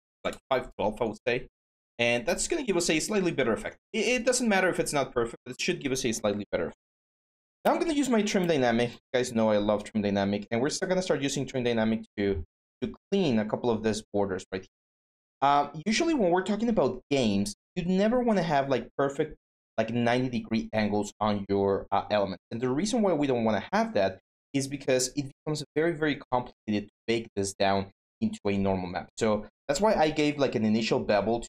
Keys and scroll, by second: 0.0-0.5 typing, 6.7-7.7 typing.